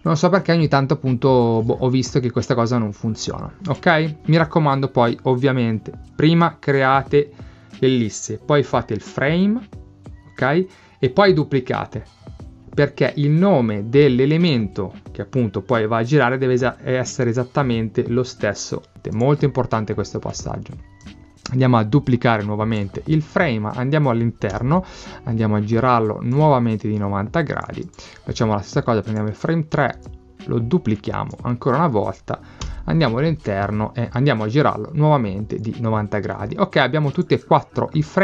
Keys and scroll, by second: 24.6 Return, 32.7 Return.